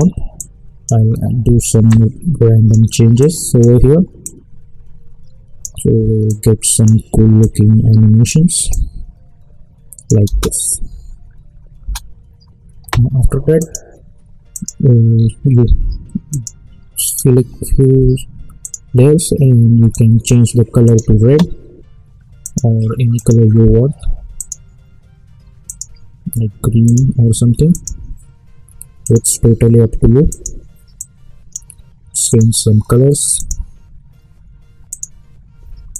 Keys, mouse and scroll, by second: 10.2 space, 13.6 ctrl+click, 15.1-16.3 scroll down 1, 16.3-35.9 drag.